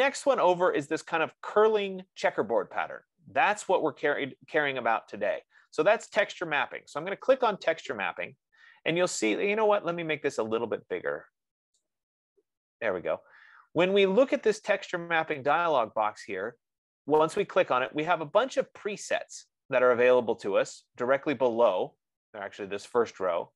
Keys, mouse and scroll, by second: 6.5-11.6 drag, 12.1-17.4 drag.